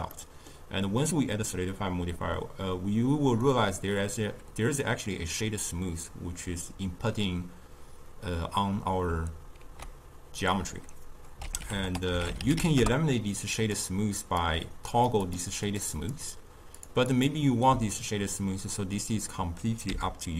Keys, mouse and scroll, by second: 0.1-3.1 middle drag, 3.3-9.5 middle drag, 9.5 ctrl+a, 14.2 click, 14.8 click, 15.2 click, 15.6 click, 16.7-17.1 drag, 19.0 click, 19.8 m.